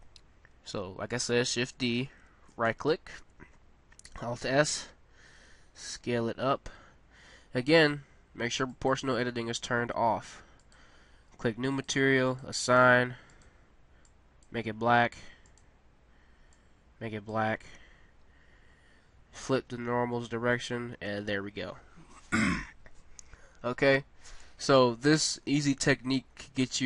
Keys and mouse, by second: 1.5 shift+d, 4.2 alt+s, 10.6-15.2 drag, 15.5-17.2 drag, 20.6 Tab, 24.7 a.